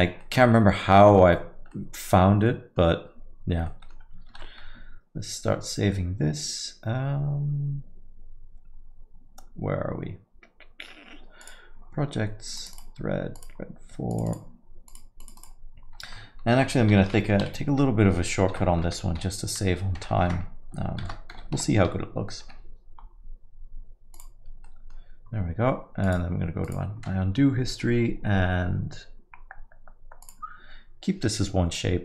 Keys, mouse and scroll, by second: 0.0 scroll down 2, 0.2 middle click, 0.5-1.0 scroll up 5, 1.1 middle click, 1.5 scroll down 1, 1.7 middle click, 2.4 middle click, 3.7 middle click, 4.3 ctrl+s, 24.6 middle click, 26.0 click.